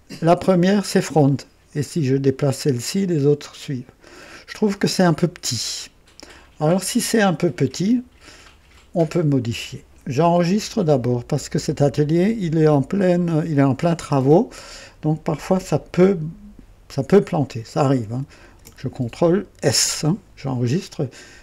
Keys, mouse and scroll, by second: 0.9-4.1 drag, 18.5 ctrl+s.